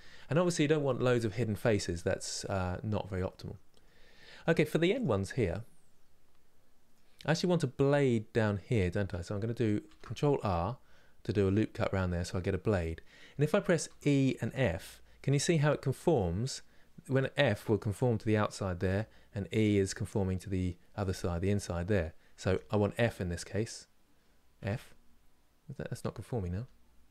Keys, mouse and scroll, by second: 4.6 click, 5.2-9.5 middle drag, 9.5 ctrl+r.